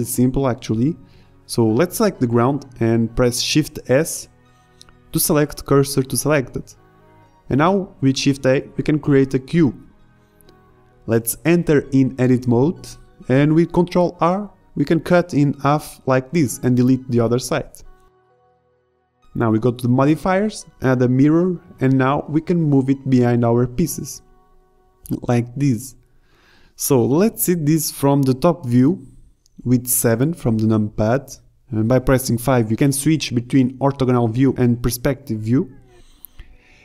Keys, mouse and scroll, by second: 0.8 ctrl+z, 1.6 shift+s, 8.9 shift+a, 11.0 Tab, 11.7 ctrl+r, 12.8 z, 13.1 a, 13.8 ctrl+Tab, 14.7 a, 15.2 a, 15.3 b, 16.2 Delete, 17.0 Tab, 17.5 z, 24.2 KP_7, 24.5 KP_5, 25.0 z.